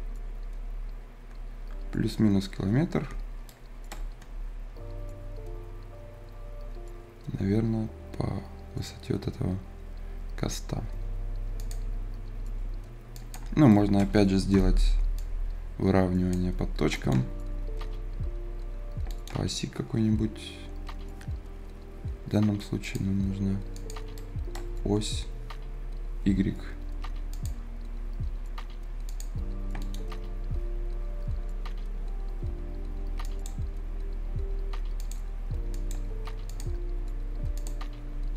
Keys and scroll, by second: 14.5 F10.